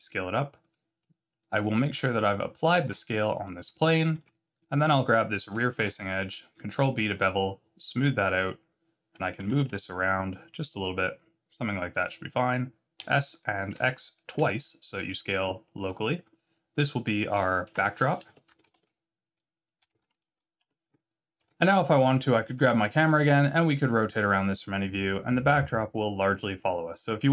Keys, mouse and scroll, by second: 2.2 Tab, 2.9 ctrl+a, 4.2 Tab, 4.6 click, 5.8 ctrl+b, 8.4 Tab, 9.2 g, 12.9 s, 17.6 F2, 20.8 Tab, 21.4 Tab, 22.9 click, 23.4 middle click, 25.7 shift+middle click.